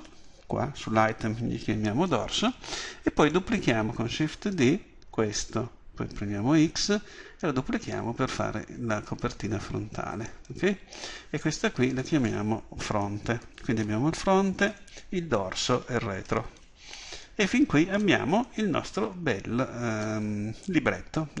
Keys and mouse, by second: 3.2 right click, 5.2 shift+d, 12.0-21.4 drag.